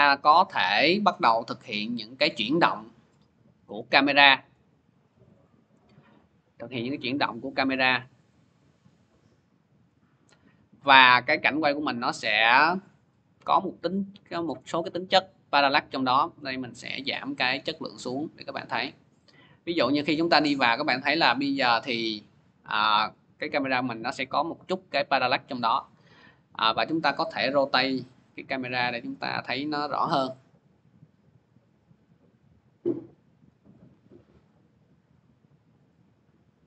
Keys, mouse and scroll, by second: 0.5 click, 2.2 click, 4.3 shift+click, 5.2 click, 9.6 click, 12.6 click, 14.4 click, 15.9 middle click, 16.3-16.6 scroll, 25.0 click, 27.0 click, 27.6 r, 33.2 click, 33.8 ctrl+z, 36.3 click.